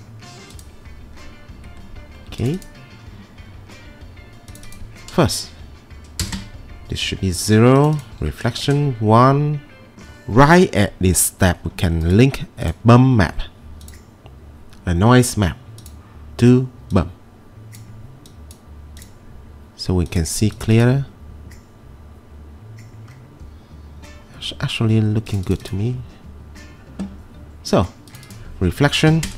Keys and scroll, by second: 6.3 0, 6.4 Return, 8.5 1, 8.7 Return, 29.1 typing, 29.2 Return.